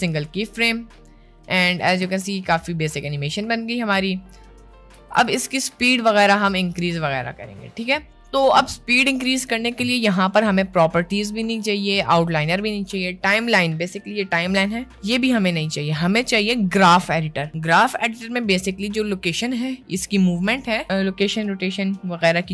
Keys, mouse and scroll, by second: 1.7 click, 2.1 space, 5.0 space.